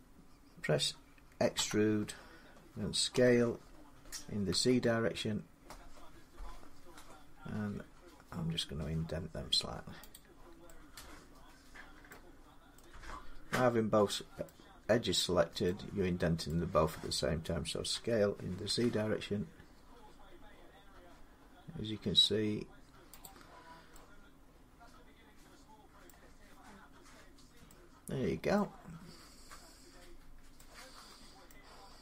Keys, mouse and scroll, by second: 1.3 e, 1.5-3.7 middle drag, 2.9 s, 4.3 z, 9.9 click, 11.9 middle click, 12.2-12.6 scroll, 12.7 middle click, 14.2 middle click, 15.0 middle click, 16.3 middle click, 17.7-18.4 typing, 21.2 z, 23.0 click, 23.5 scroll down 4, 25.8 middle click, 28.3 middle click, 31.3 middle click.